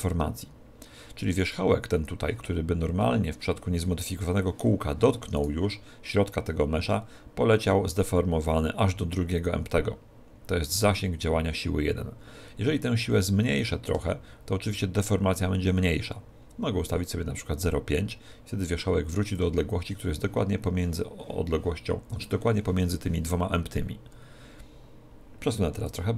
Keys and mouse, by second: 13.5 click, 25.9 click.